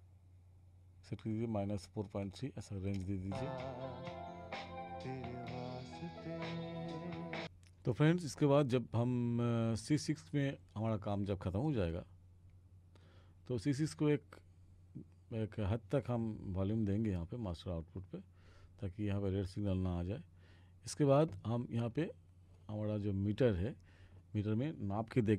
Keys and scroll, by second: 3.2 space.